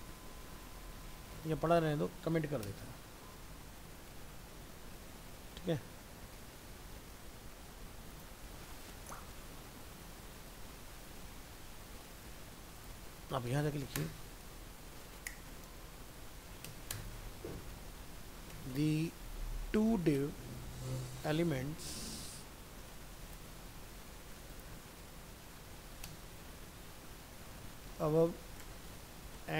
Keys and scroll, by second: 1.5 ctrl+z, 3.0 ctrl+s, 3.5 alt+Tab, 23.5 ctrl+c, 24.8 ctrl+v.